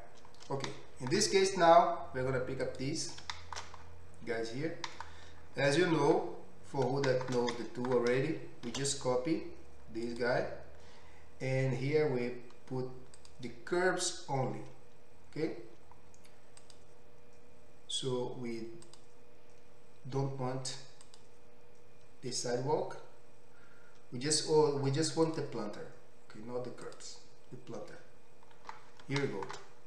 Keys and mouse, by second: 1.1-1.7 right drag, 1.7-3.6 middle drag, 2.7 click, 2.7 right click, 3.6-4.7 right drag, 4.7-7.9 middle drag, 7.9-13.8 shift+right drag, 9.7 shift+d, 13.8-29.8 middle drag.